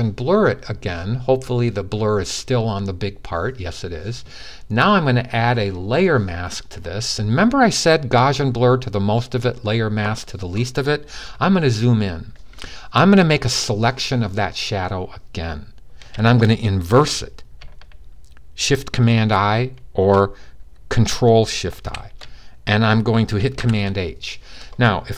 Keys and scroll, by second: 21.6 shift+super+l, 23.3 super+h.